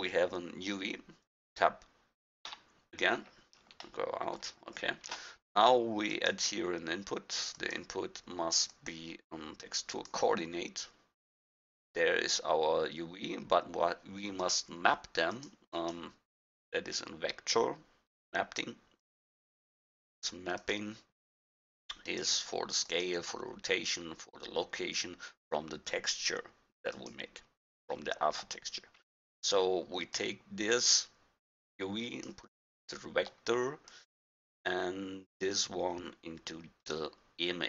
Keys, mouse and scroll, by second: 2.5 Tab, 3.5-5.8 drag, 6.1-6.5 drag, 6.9-9.3 drag, 14.9-17.7 drag, 20.6-20.9 drag, 23.5-26.4 middle drag, 27.0 click, 27.5 click, 27.9 middle click, 28.1 click, 28.7-30.0 middle drag, 30.2-32.0 drag, 33.0 middle click, 33.2-33.9 middle drag, 33.9-34.7 drag, 35.8-37.3 drag.